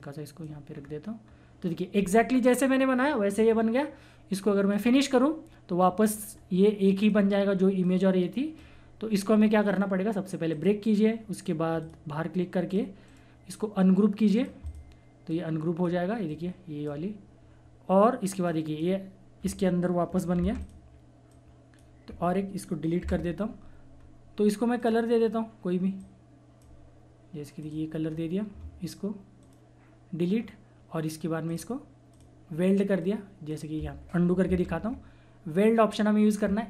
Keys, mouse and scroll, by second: 0.7 scroll down 1, 4.7 click, 6.3 scroll down 1, 6.8-10.1 drag, 13.0 right click, 14.3 click, 20.3 ctrl+z, 20.6 click, 23.0 Delete, 23.9-24.8 scroll up 1, 24.8 click, 28.1 scroll down 1, 29.4 right click, 30.3-31.4 scroll up 1, 31.4 click, 34.4 ctrl+z.